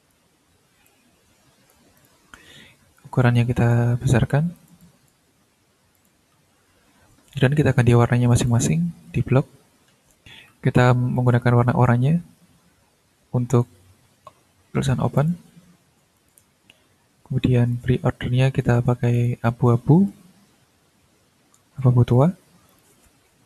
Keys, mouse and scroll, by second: 0.8-1.9 drag, 1.9 click, 2.9 click, 4.5 click, 5.9 click, 7.3 click, 7.7 click, 8.7 ctrl+scroll down 1, 9.9 middle click, 10.1 click, 10.2 middle click, 11.1 click, 13.5 click, 15.1 click, 16.1 click, 17.7 click, 19.1 click, 20.0-22.3 drag, 22.7 click.